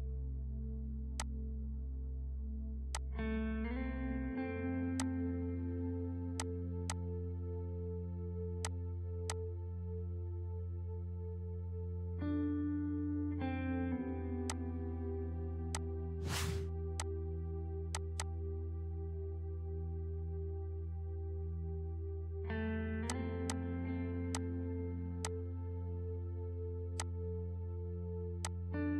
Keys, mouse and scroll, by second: 0.9 ctrl+space, 1.1 click, 1.5 ctrl+r, 2.9 click, 7.4 ctrl+r, 8.6 shift+click, 10.2 right click, 11.4-12.8 typing, 13.6 shift+F2, 14.5 click, 14.9 F3, 15.7 click, 17.7 ctrl+u, 17.9 ctrl+click, 23.1-28.9 drag.